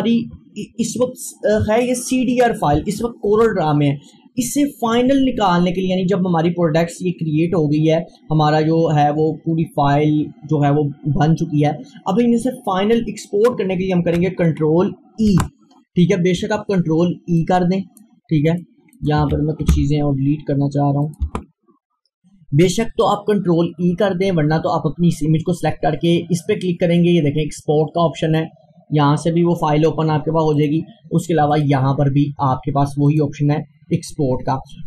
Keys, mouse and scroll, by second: 14.5 ctrl+Num_Lock, 15.3 ctrl+e, 17.4 click, 19.8 Delete, 21.1 click, 21.3 Delete, 22.7 click, 28.3 click, 28.6-34.8 drag.